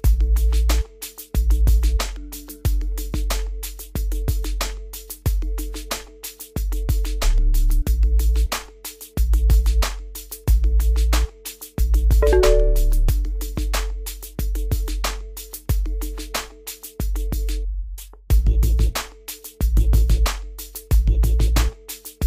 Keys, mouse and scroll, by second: 18.5-22.2 drag.